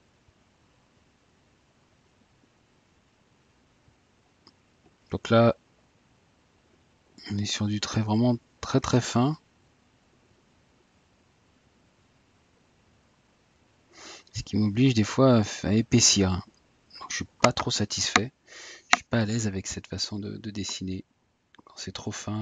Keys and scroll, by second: 21.4 Tab.